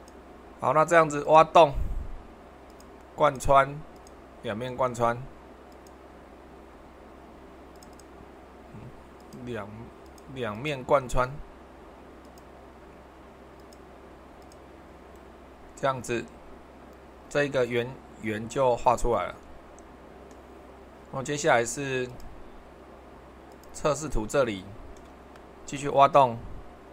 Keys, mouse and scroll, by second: 1.2-2.3 middle drag, 13.6-18.7 drag, 19.2-21.3 middle drag, 22.0-23.1 drag, 23.5 click.